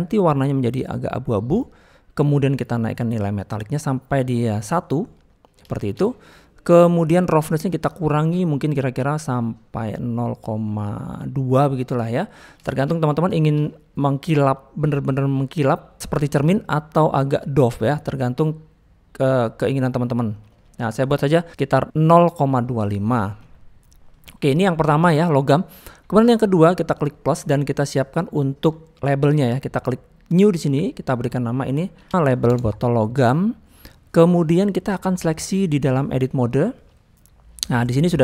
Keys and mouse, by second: 3.3-4.6 drag, 5.1 middle click, 5.7 shift+middle click, 6.1 middle click, 7.7-11.5 drag, 11.8-12.4 middle drag, 12.6 shift+middle drag, 13.3 shift+middle click, 13.6 middle click, 15.1-20.3 drag, 20.6 middle click, 22.8 shift+middle drag, 23.4-23.9 middle drag, 24.1 middle click, 25.8 middle click, 30.4 click, 31.2-32.5 drag, 33.8 middle click, 34.7 middle click, 35.9-36.9 drag, 37.6 middle click.